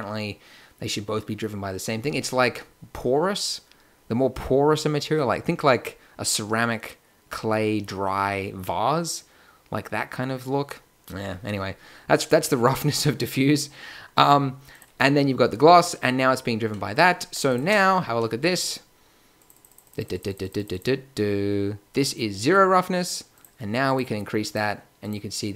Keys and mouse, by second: 12.4-14.2 drag, 14.7-15.5 drag, 18.6-19.7 middle drag, 24.6 click.